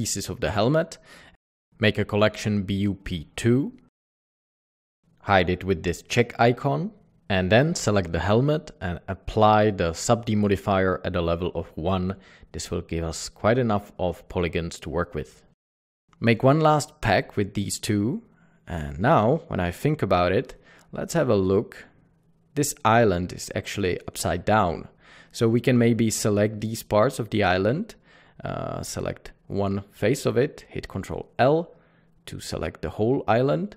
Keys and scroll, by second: 0.0-0.1 typing, 0.3 Escape, 1.5-2.7 typing, 2.8 Return, 12.5 Return, 12.5 Tab, 12.8 typing, 15.6 typing, 20.0 Tab, 21.5 Tab, 21.7 ctrl+s, 31.7 ctrl+l.